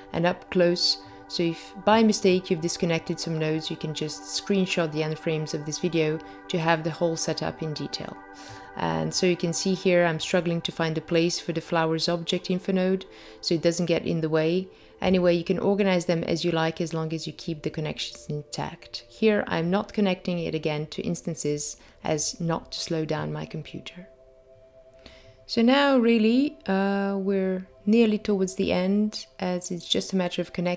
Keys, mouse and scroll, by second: 1.1 middle click, 3.7 click, 7.7 click, 8.6 click, 11.2 click, 13.3 click, 19.3 click, 22.7 click, 25.4 middle click, 25.4 scroll up 6, 29.7 middle click.